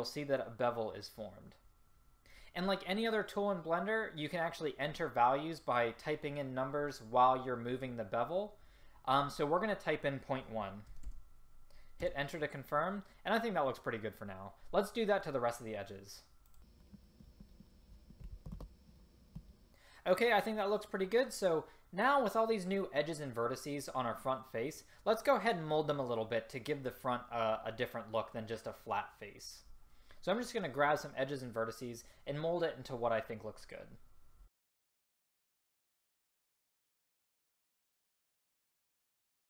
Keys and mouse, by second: 16.6 click, 17.0 middle drag, 18.2 ctrl+b, 19.4 a, 34.5 click, 36.9 click, 37.0 ctrl+z, 37.6 click, 38.4 s.